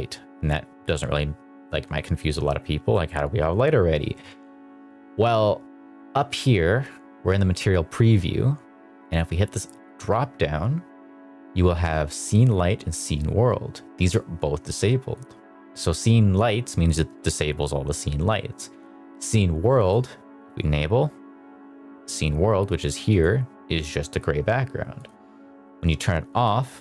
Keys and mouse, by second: 2.8 middle click, 9.8-21.2 drag, 23.0 click, 24.9-26.8 drag.